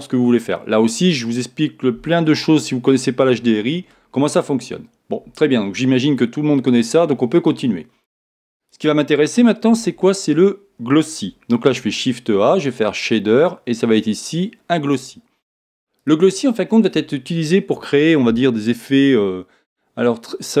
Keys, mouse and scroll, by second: 8.6-10.4 drag, 9.7 x, 16.1-17.9 drag.